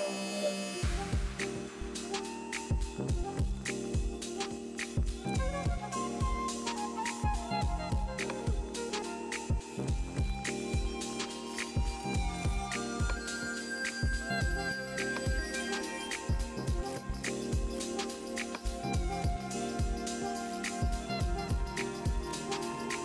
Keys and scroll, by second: 0.0-2.6 typing, 5.2-6.2 typing.